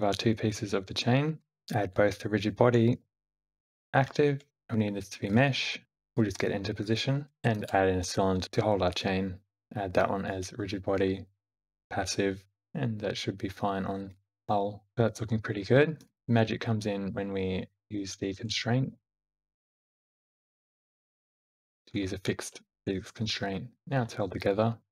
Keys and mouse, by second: 2.8 q, 4.5-5.1 drag, 6.5 r, 7.3 shift+a, 9.4 click, 9.6 Tab, 9.6 q, 14.3 space, 14.9 shift+Left, 14.9 space, 15.8 click, 19.2 q, 22.8 space, 23.8 space, 24.2 click.